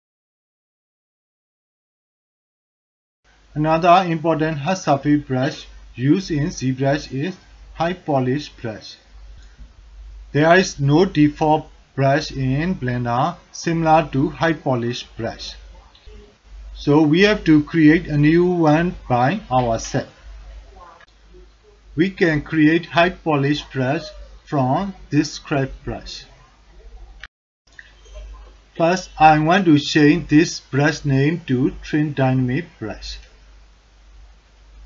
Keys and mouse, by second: 0.9-2.6 drag, 2.8 middle click, 2.9 alt+click, 3.2 alt+shift+click, 3.6 alt+middle click, 3.6 alt+click, 4.0-6.6 drag, 6.8-8.0 drag, 8.2 click, 8.6 alt+click, 9.0 ctrl+alt+click, 9.3-9.8 drag, 10.1 click, 11.6 alt+click, 12.0-13.3 drag, 13.5-14.7 drag, 15.0 click, 15.3-16.3 drag, 16.5 middle click, 16.6 alt+click, 17.3 alt+shift+click, 17.8-19.4 drag, 19.6 alt+click, 19.9 ctrl+alt+drag, 21.0-22.6 drag, 22.9 alt+click, 23.2 ctrl+alt+drag, 33.0-34.8 drag.